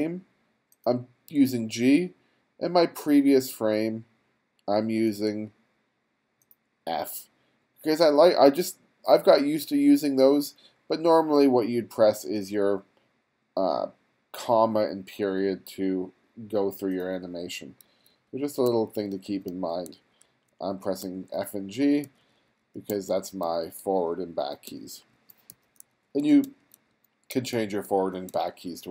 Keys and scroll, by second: 17.9 f, 18.7 g, 19.9 f, 21.0 g, 22.1-28.3 typing.